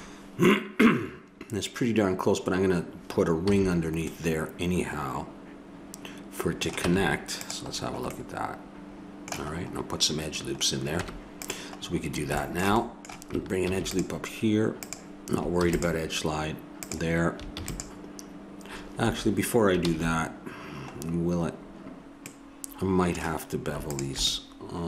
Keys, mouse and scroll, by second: 3.5 a, 4.1-5.9 middle drag, 7.0 Tab, 11.0 Tab, 13.7 ctrl+r, 15.6 ctrl+r, 17.5 ctrl+r, 19.8 ctrl+z, 23.9-24.8 drag.